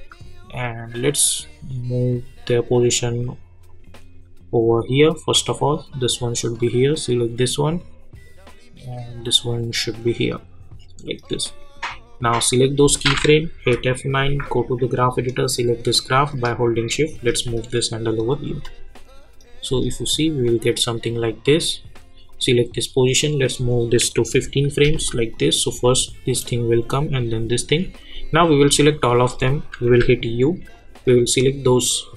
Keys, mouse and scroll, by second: 4.5 -, 5.5-12.1 drag, 12.3-13.5 drag, 13.5 F9, 14.4-18.2 drag, 18.5 space, 20.4 click, 24.3 [, 24.9 space, 28.4 click, 29.8 u, 30.7-32.1 drag.